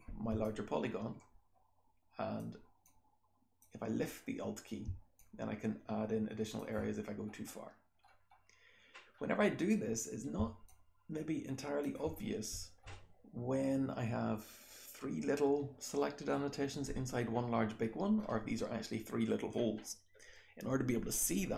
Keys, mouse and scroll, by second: 0.4-2.3 drag, 1.4-2.3 scroll up 1, 2.3-4.8 scroll up 1, 2.8-3.5 drag, 4.8-6.5 alt+scroll up 1, 5.1-6.5 alt+drag, 6.5-7.2 alt+scroll up 1, 7.2-9.1 scroll down 1, 9.1-10.3 scroll up 1, 10.3-11.7 alt+scroll up 1, 10.6-11.7 alt+drag, 11.7-12.1 alt+scroll up 1, 12.1-13.4 scroll down 1, 13.4-14.7 scroll down 1, 14.7-16.0 scroll down 1, 16.0-17.4 scroll down 1, 17.4-18.1 scroll down 1, 18.1-19.7 scroll up 1, 19.7-21.4 scroll down 1, 21.4-21.5 scroll down 1.